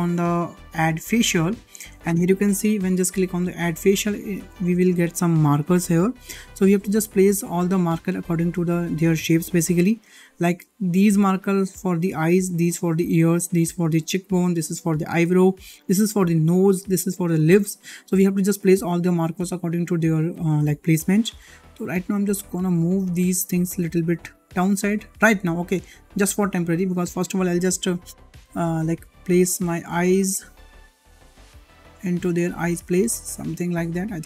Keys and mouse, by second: 1.0 click, 4.0 shift+middle click, 18.7 click, 19.3 l, 20.5 g, 22.6 click, 23.0 l, 23.8 g, 26.7 click, 27.5 l, 28.4 click, 29.9 click, 29.9 click, 30.9 click, 31.0 click, 32.4 click, 32.7 click, 33.8 click, 33.9 click.